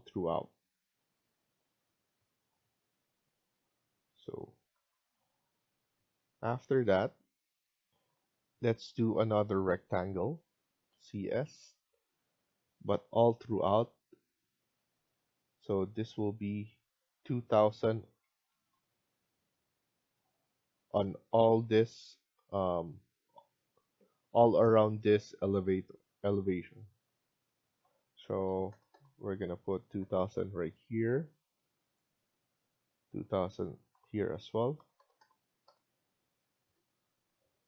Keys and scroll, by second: 7.8 F1, 8.7 Escape, 10.4-11.3 typing, 18.1 Escape, 18.4 Escape, 20.3 Escape, 22.2 Escape, 28.6-29.3 typing, 30.3 Escape, 30.5 Escape, 34.4-35.2 typing, 37.0 Escape, 37.2 Escape.